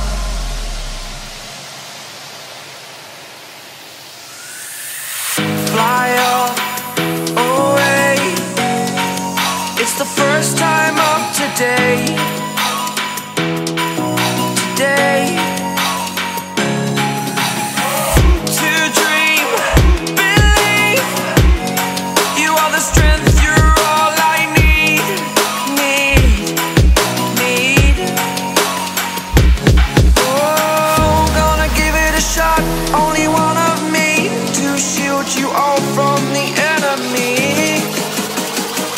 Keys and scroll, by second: 1.8 space, 2.3 super+space, 2.4 super+space, 2.6 super+space, 3.3 space, 3.8 alt+super+space, 3.9 alt+super+space, 4.1 alt+super+space, 4.2 alt+super+space, 4.3 alt+super+space, 4.4 alt+super+space, 4.5 alt+super+space, 4.6 alt+super+space, 4.7 alt+super+space, 4.8-5.1 alt+super+space, 5.1-6.2 typing, 9.0-9.6 typing, 13.0 shift+super+[, 13.8 space, 14.3 alt+super+space, 14.4 alt+super+space, 14.5 alt+super+space, 18.0-20.6 typing, 18.5 super+space, 18.6 super+space, 24.8-30.6 typing, 35.8 shift+super+[, 36.8 super+2, 37.7 super+space, 37.9 super+space, 38.1 super+space, 38.6 super+space.